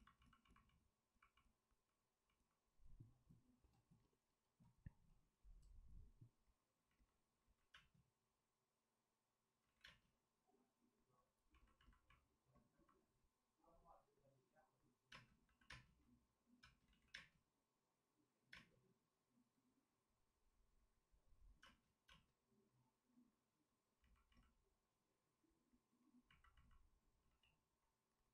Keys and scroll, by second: 7.4 ctrl+z, 7.7 space, 9.8 ctrl+z, 9.8 space, 15.1 space, 15.4 c, 15.7 space, 16.6 space, 17.1 ctrl+z, 21.6 space, 27.2 x.